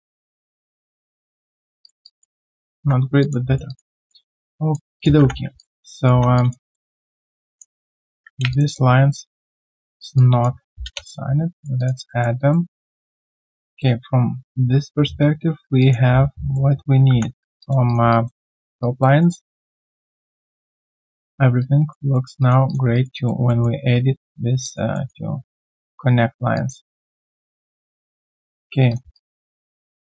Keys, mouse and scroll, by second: 1.6 alt+right click, 2.0 alt+click, 2.4 alt+middle click, 2.8 1, 3.2 alt+click, 3.5 alt+right click, 3.7 alt+click, 3.9 alt+middle click, 4.2 alt+right click, 4.4 alt+click, 5.5 alt+click, 5.9 alt+right click, 6.2 1, 6.3 alt+click, 6.7 alt+middle click, 7.0 right click, 8.5 shift+click, 8.6 shift+double click, 10.1 alt+click, 11.5 alt+right click, 11.8 alt+click, 12.1 alt+middle click, 12.4 alt+click, 13.3 alt+scroll down 1, 13.6 alt+click, 15.8 alt+click, 16.0 alt+q, 16.2 right click, 17.6 alt+click, 18.1 alt+click, 19.2 alt+middle click, 19.4 alt+click, 20.0 alt+middle click, 21.1 alt+click, 22.1 alt+middle click, 22.4 alt+click, 22.9 alt+right click, 23.1 alt+click, 23.4 alt+middle click, 24.5 alt+middle click, 24.6 alt+click, 24.9 alt+middle click, 25.3 right click, 26.5 alt+click, 27.0 alt+right click, 27.3 alt+click, 27.5 alt+middle click, 27.7 alt+scroll down 1, 28.1 alt+click, 28.4 alt+right click, 28.6 alt+click, 29.1 alt+right click, 29.5 alt+middle click, 29.8 alt+right click, 30.0 alt+click.